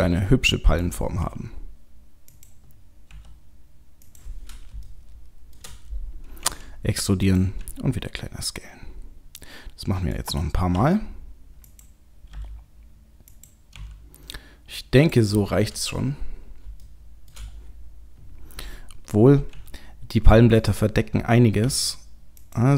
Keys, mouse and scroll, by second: 0.0 g, 1.2 r, 3.1 s, 4.9 shift+middle click, 6.4 e, 7.5 s, 10.8 e, 12.3 g, 13.7 r, 15.3-16.4 scroll down 7, 16.1-16.6 scroll up 4, 16.8 shift+middle click, 17.5-18.2 scroll up 1, 18.2-19.5 scroll up 1, 19.8 s, 21.6 e.